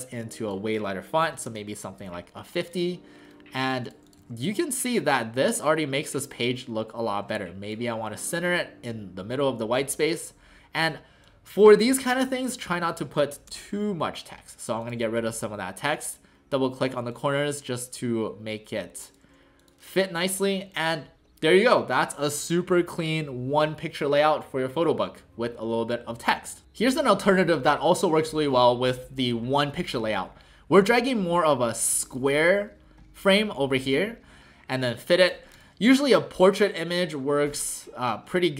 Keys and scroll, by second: 1.0-1.8 typing, 4.2 w, 5.4 w, 8.5 w, 13.5 BackSpace, 34.4 ctrl+alt+shift+c.